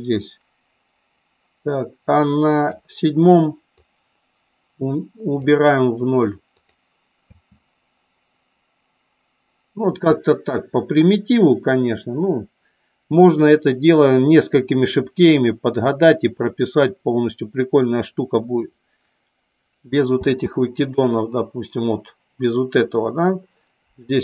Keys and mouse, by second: 4.0-5.5 drag, 21.1 click.